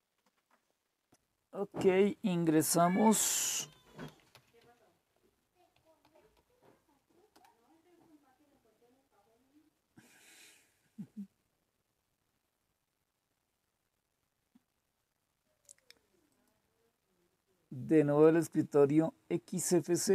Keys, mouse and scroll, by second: 1.0 click, 3.2-7.1 typing, 7.3 Return, 8.2 typing, 16.3-17.6 drag, 18.2 click.